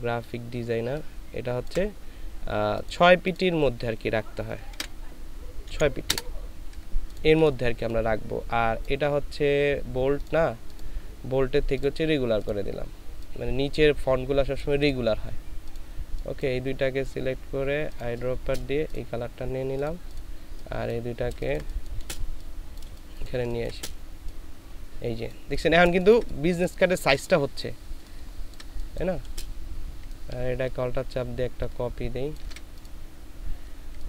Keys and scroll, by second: 4.7 ctrl+a, 5.6 KP_6, 6.0 Return, 18.4 ctrl+space, 21.5 ctrl+space, 25.9 ctrl+space, 26.8 ctrl+space.